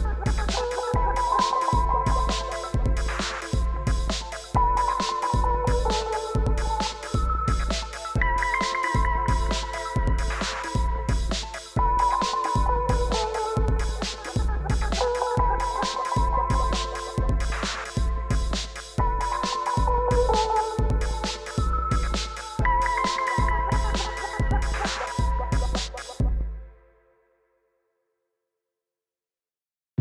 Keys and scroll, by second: 0.3 Return, 26.8 i.